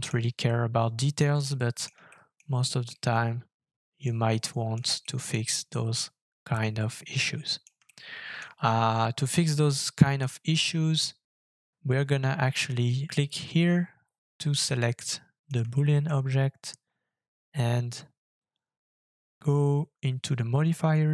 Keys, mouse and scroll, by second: 0.4 shift+middle click, 1.5 middle click, 2.1 shift+middle click, 2.9 shift+middle click, 4.3 middle click, 5.0 shift+middle click, 7.9 shift+middle click, 12.6 scroll down 2, 14.5 middle click, 15.7 shift+middle click, 16.1 shift+scroll up 1.